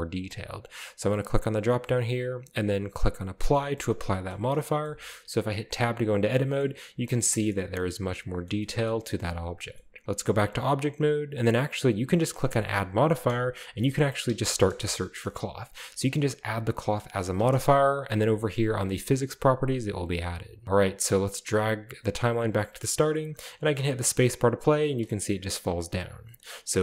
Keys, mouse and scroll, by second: 1.2 click, 3.5 click, 4.0-4.7 shift+middle drag, 4.0-4.9 shift+scroll down 2, 4.9-5.7 middle drag, 5.7 Tab, 6.7-10.0 middle drag, 9.4-10.0 scroll down 1, 10.1 Tab, 11.2-12.0 scroll up 1, 12.4 click, 13.8-14.6 typing, 17.4 Return, 19.1 click, 20.6-21.0 scroll down 2, 21.5-22.3 drag, 22.7 click, 23.2-24.2 scroll up 1, 23.6 space, 24.2-25.2 scroll down 1, 24.6 space, 25.2-25.6 drag, 26.0-26.3 scroll up 4, 26.3 shift+middle drag.